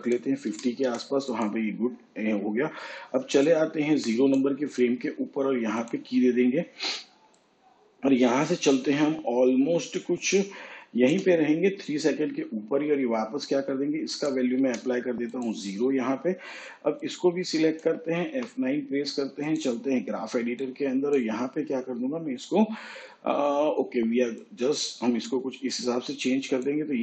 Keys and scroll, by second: 2.3 5, 16.4 0, 20.1 F9.